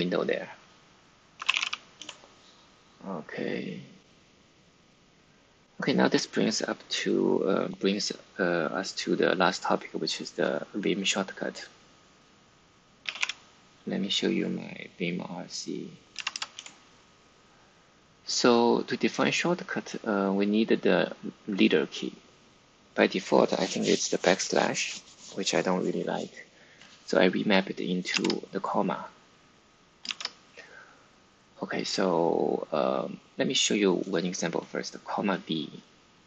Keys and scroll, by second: 1.0-2.0 typing, 12.7-13.6 typing, 15.0-16.2 typing, 16.5 Return, 28.0 shift+v.